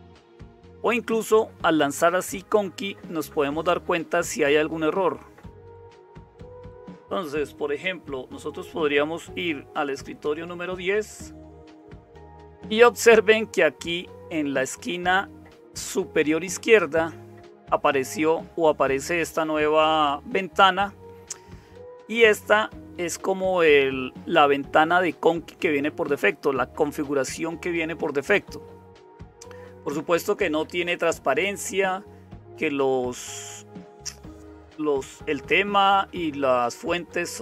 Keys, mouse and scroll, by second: 0.0-37.4 typing, 10.2 super+0.